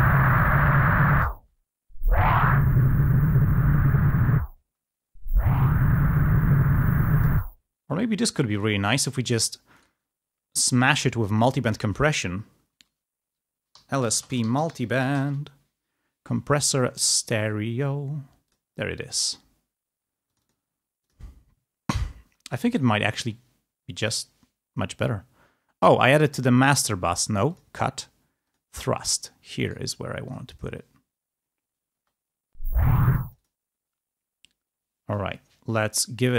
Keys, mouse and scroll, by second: 0.1-1.2 drag, 1.2 space, 2.7-4.3 drag, 4.4 space, 6.5-7.8 drag, 7.4 space, 8.7 click, 11.5 click, 13.6-15.9 typing, 19.2 click, 20.4-21.5 drag, 26.5 right click, 27.6 click, 28.6 click, 29.7 right click, 30.3 click, 32.2 space, 33.2 space, 33.5 click, 36.2-36.3 drag.